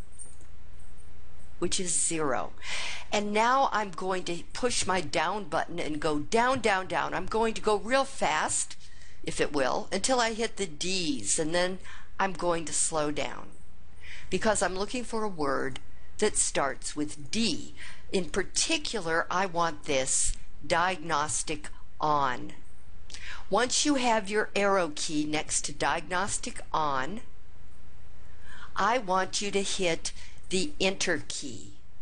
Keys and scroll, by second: 0.3 0, 5.5 Up, 15.5 Down, 16.1 Down, 16.6 Down, 17.2 Down, 18.2 Down.